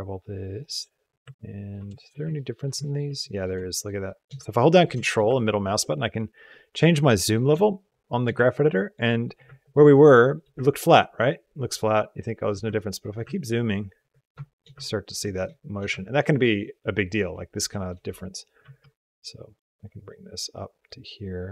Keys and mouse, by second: 1.3 ctrl+click, 1.9 shift+click, 2.3 ctrl+click, 2.8 shift+click, 3.1 ctrl+click, 3.4 shift+click, 3.9 shift+click, 4.4 ctrl+click, 5.3-7.1 ctrl+middle drag, 7.9 shift+middle click, 8.4 ctrl+middle click, 9.9 shift+middle click, 10.6-12.3 ctrl+drag, 12.6 ctrl+click, 13.1 ctrl+click, 13.4 ctrl+click, 13.8 ctrl+click, 14.4 shift+click, 14.6 ctrl+click, 15.2 shift+click, 15.9 ctrl+click, 17.4 shift+click, 18.4 g.